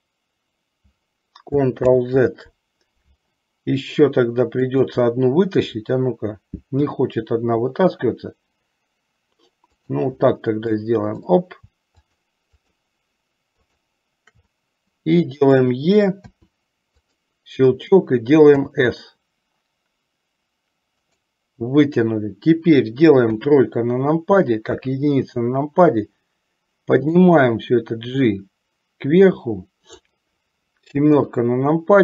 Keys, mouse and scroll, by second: 1.9 ctrl+z, 4.7 click, 6.9 e, 11.0 click, 12.2 shift+click, 12.7 shift+click, 13.7 shift+click, 16.4 e, 18.6 s, 23.4 KP_3, 24.8 KP_1, 27.2-30.2 drag, 31.3 KP_7.